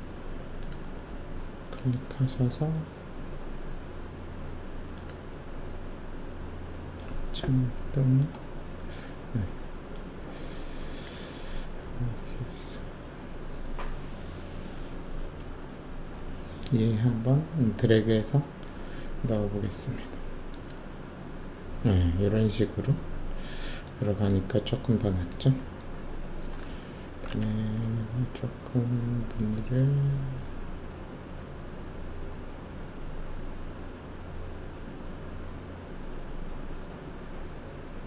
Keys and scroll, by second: 27.8 alt+e.